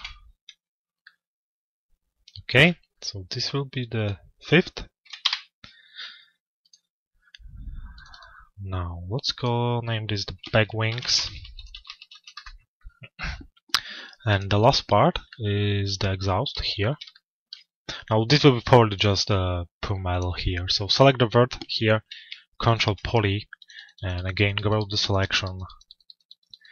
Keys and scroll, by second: 4.9 Return, 8.4 Return, 11.8 Return.